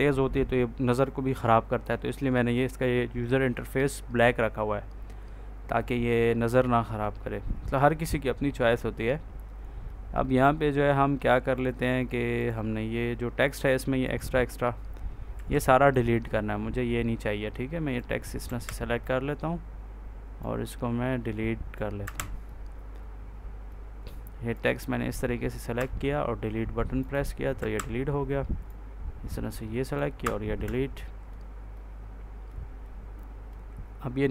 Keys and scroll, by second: 15.2 Delete, 18.3 Delete, 21.9 Delete, 25.7 Delete, 27.5 Delete, 30.1 Delete.